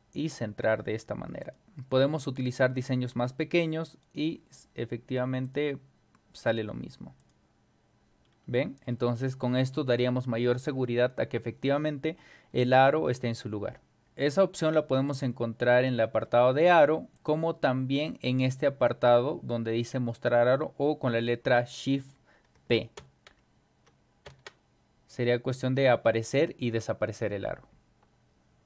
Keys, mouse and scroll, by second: 1.4 click, 2.2 scroll up 2, 2.5-2.9 scroll down 4, 4.0 right click, 5.5 click, 6.5 click, 7.2 click, 8.3 middle click, 8.3 scroll down 2, 8.9 scroll up 2, 12.1 scroll down 2, 12.5 scroll up 2, 15.1 click, 17.1 click, 22.7-24.3 typing.